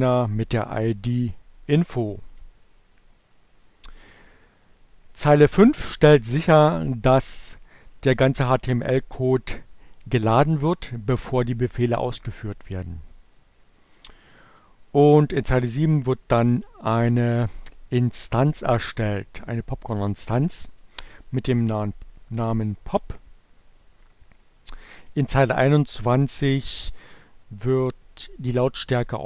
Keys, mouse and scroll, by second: 2.0 click, 4.0 click, 12.4 click, 14.3 click, 24.6 click.